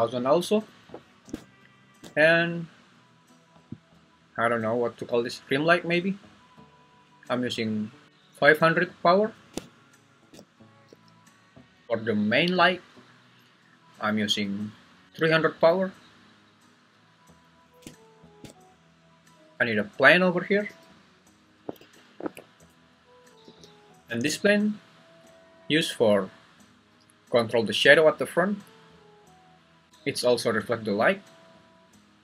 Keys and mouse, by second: 0.7 Escape, 10.9 g, 16.4-18.1 middle drag, 20.6 g, 21.8 Escape, 22.3 `, 23.4 g, 24.1 z.